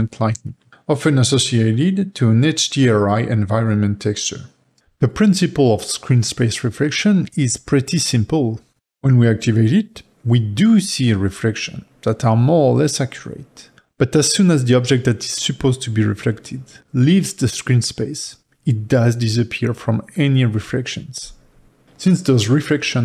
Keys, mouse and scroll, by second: 0.6-1.8 shift+middle drag, 1.9-5.1 shift+middle drag, 4.8 click, 5.7 g, 8.1 click, 10.2 g, 13.7-16.8 shift+middle drag, 16.8 g, 21.4 g, 22.7-23.0 ctrl+middle drag.